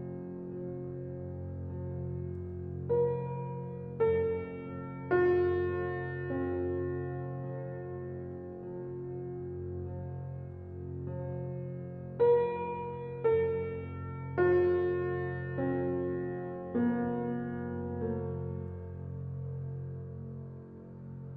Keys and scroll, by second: 18.6 ctrl+c, 20.6 ctrl+v.